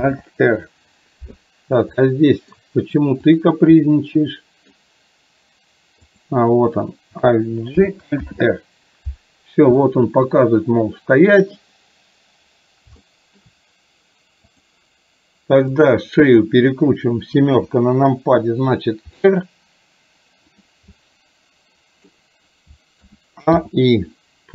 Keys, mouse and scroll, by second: 0.1 alt+r, 2.1-2.7 middle drag, 3.3 click, 3.9-4.8 middle drag, 6.1 click, 7.8 alt+g, 9.9-11.1 middle drag, 13.2 shift+middle click, 14.6 click, 15.9 drag, 17.6 KP_7, 19.2 r, 21.1-22.2 middle drag, 23.1 a, 23.7 i.